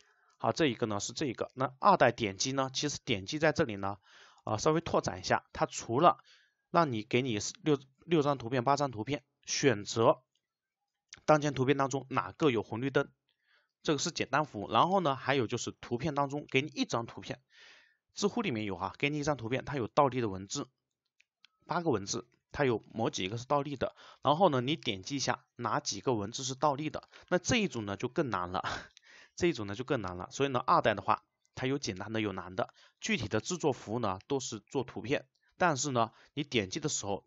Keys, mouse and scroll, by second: 4.4 click.